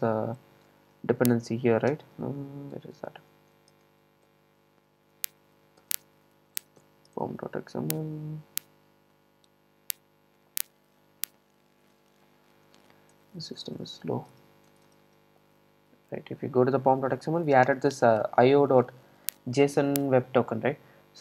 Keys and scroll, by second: 4.0 super+n, 6.1 shift+super+n, 6.2 super+o, 13.3 super+e.